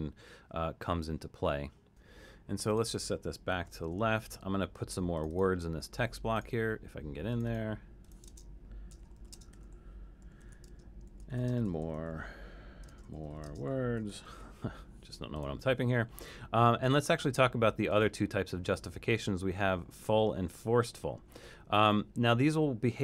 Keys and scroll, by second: 3.7 super+[, 8.4-14.9 typing.